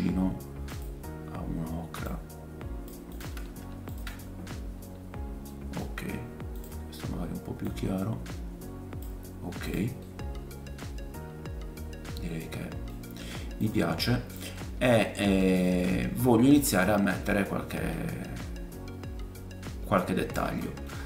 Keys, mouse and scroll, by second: 5.5 middle click, 6.0 scroll up 1, 6.5 click, 9.6 click, 10.0 middle click, 12.9 scroll down 2, 13.6 click, 13.8-14.5 scroll down 4, 13.9-17.4 drag, 15.4 middle click, 16.0 middle click, 16.0-16.5 scroll down 1, 20.9-21.0 scroll up 3.